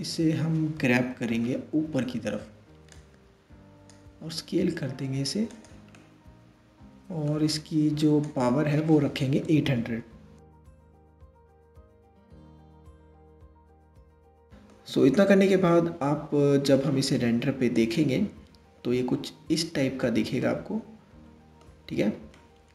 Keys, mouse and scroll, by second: 0.4 KP_3, 2.5 drag, 3.9 s, 5.6-7.9 middle drag, 7.9-9.4 drag, 9.4 KP_0, 13.8-14.4 middle drag, 14.4-15.3 scroll up 4, 15.3-17.6 middle drag, 17.6 click, 19.2-20.0 scroll up 1, 20.0-22.7 middle drag.